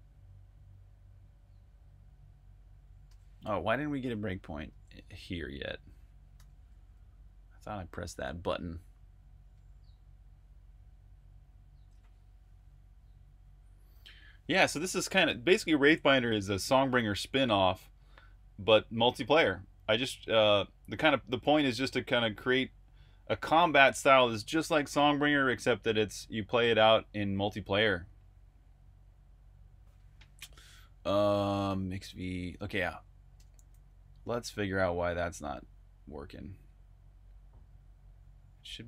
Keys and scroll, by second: 2.9 super+Tab, 4.8 super+Tab, 6.2 super+\, 6.9-7.3 typing, 8.0 super+o, 9.0-9.8 typing, 10.2 Return.